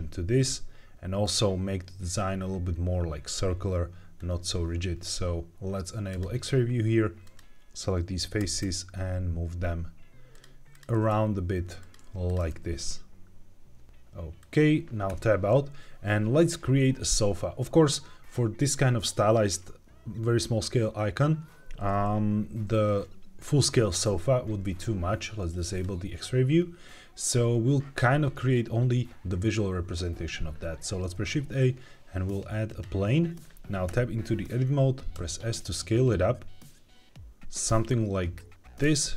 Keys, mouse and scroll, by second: 1.1-4.1 drag, 4.1-6.0 scroll up 1, 6.0 click, 7.1 click, 8.3 g, 8.5 x, 10.2 click, 10.6 click, 10.8 g, 11.0 x, 11.7 click, 12.2 click, 12.3 g, 12.4 x, 14.3 click, 15.0 Tab, 25.7 click, 26.5-28.8 scroll down 1, 31.0 shift+a, 33.8 Tab, 38.7-39.1 drag.